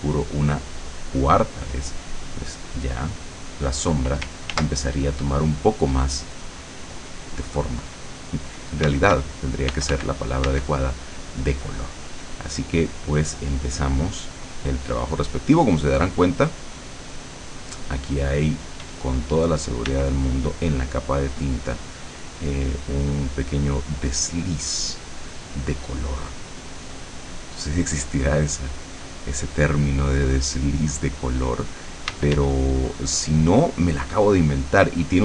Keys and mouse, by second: 0.4 click, 2.9 click, 4.6 ctrl+z, 8.9 d, 9.8 f, 10.9-14.6 drag, 10.9 d, 14.9 click, 15.8-17.9 drag, 19.0 d, 19.2-25.4 drag, 20.0 d, 25.6 click, 28.2-34.0 drag, 32.2 d, 34.7-35.2 drag.